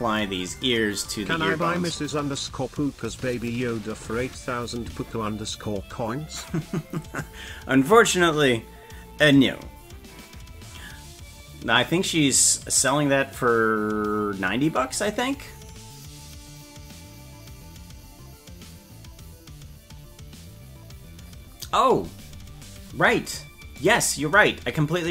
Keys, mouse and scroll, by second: 23.8 right click.